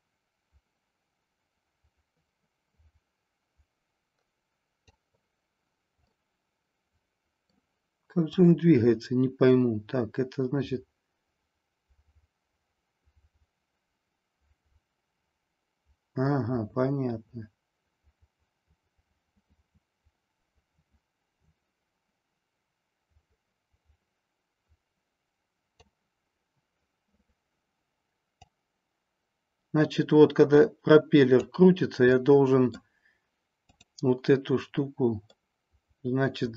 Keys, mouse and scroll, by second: 6.0-7.6 middle drag, 8.3-25.8 drag, 28.4 click, 32.0-32.8 middle drag, 35.3-36.5 middle drag.